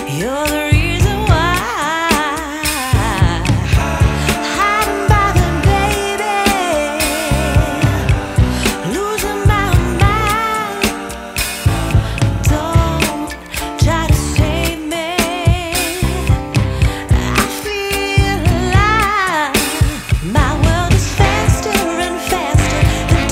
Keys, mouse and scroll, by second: 4.9 scroll down 6, 6.0-6.3 drag, 6.3-7.1 scroll down 1, 7.1-8.7 drag, 9.4 click, 14.7 click, 17.2 click, 19.8-20.6 scroll down 2, 22.5 scroll up 4.